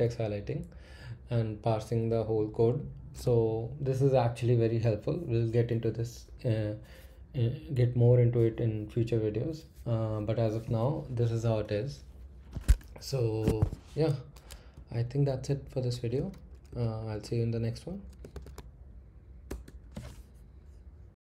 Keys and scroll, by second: 12.7 Escape, 13.2 Escape, 13.3 Escape, 13.4 Escape, 16.7 shift+;, 18.0-18.8 typing, 19.5 Return.